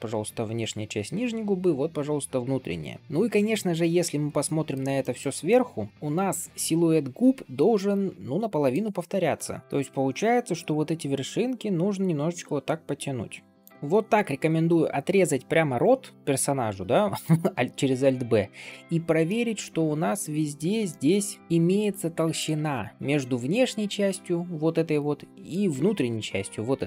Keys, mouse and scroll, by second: 2.3 d, 2.3-2.8 d, 2.8 right click, 3.0-4.6 middle drag, 3.0-3.4 scroll up 2, 4.9 shift+middle click, 5.3 middle click, 7.8 middle click, 9.2 KP_7, 9.6 click, 10.5 g, 13.7 alt+b, 13.7 scroll down 2, 16.1 scroll up 1, 16.3 middle click, 17.4 scroll up 2, 17.7 middle click, 18.5 shift+middle click, 18.8 scroll up 2, 19.1-20.4 middle drag, 20.8 shift+middle click, 21.2 click, 21.5 g, 22.6 middle click, 23.5 middle click, 24.9 middle click, 26.0-26.8 middle drag.